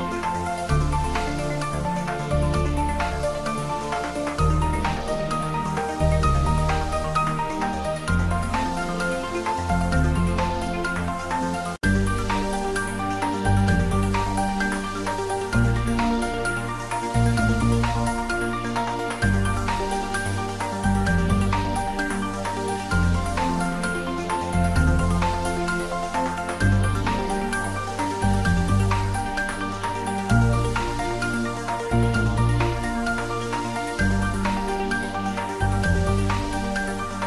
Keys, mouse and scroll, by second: 0.2-0.8 middle drag, 0.9-1.6 scroll up 2, 1.6 click, 2.3-2.6 scroll down 2, 2.6 click, 5.3 right click, 5.8 click, 6.2 scroll up 1, 6.5 scroll down 1, 6.7-7.9 middle drag, 7.9-8.4 scroll up 1, 8.4 middle click, 9.1 ctrl+z, 9.4 middle click, 9.7 scroll down 1, 9.9 middle click, 10.4 shift+a, 11.1 click, 13.3-13.7 typing, 13.9 click, 15.6 middle click, 16.2 Tab, 16.8-17.3 typing, 18.7 scroll up 1, 19.5-21.4 drag, 21.4 ctrl+z, 21.9 ctrl+z, 22.8 click, 24.0 ctrl+z, 24.8 ctrl+z, 25.8 Tab, 26.6-28.5 drag, 28.5 click, 29.3 ctrl+z, 29.5 ctrl+right click, 29.9 click, 30.4 scroll down 2, 30.7 ctrl+z, 31.5 click, 32.2 ctrl+z, 32.7 right click, 33.0-36.6 drag, 37.0-37.2 drag.